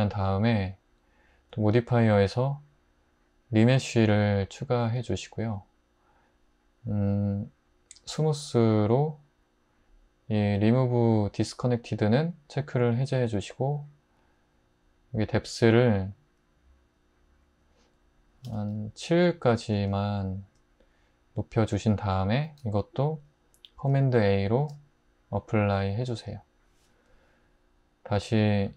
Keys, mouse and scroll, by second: 18.5 ↺, 24.6 super+a.